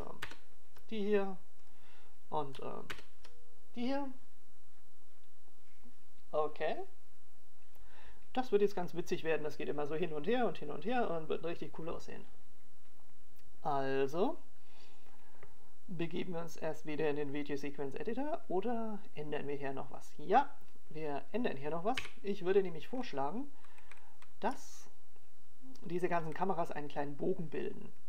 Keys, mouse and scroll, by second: 0.1 ctrl+KP_0, 1.4 click, 2.6 ctrl+KP_0, 3.9 click, 5.3 ctrl+KP_0, 24.5 KP_1, 25.4-26.0 scroll down 1, 26.0 scroll down 3, 26.4-27.1 scroll up 2, 27.1 shift+middle click.